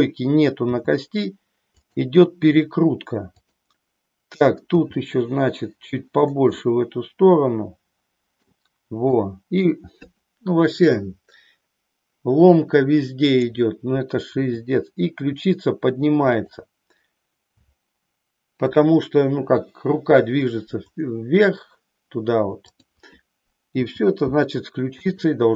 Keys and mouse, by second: 0.7 g, 2.0 click, 4.7 g, 6.6-8.6 middle drag, 9.1 middle click, 13.2 click, 14.4 r, 16.5 click, 23.7 g, 25.1 click.